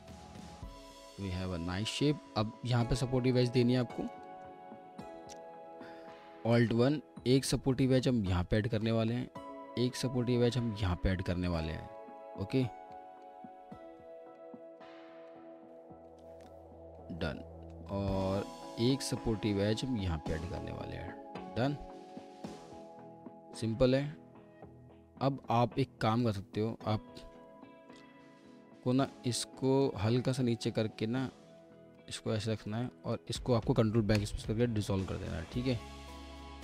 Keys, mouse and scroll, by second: 0.1 alt+middle click, 3.8 alt+middle click, 5.1-6.1 typing, 5.7 alt+middle click, 6.4 alt+1, 7.3-7.8 scroll up 1, 12.0 middle click, 14.6 alt+middle click, 17.9 alt+middle click, 26.1 w, 27.3 w, 27.4 alt+middle click, 32.2 alt+middle click, 34.2 ctrl+BackSpace, 35.5 alt+middle click.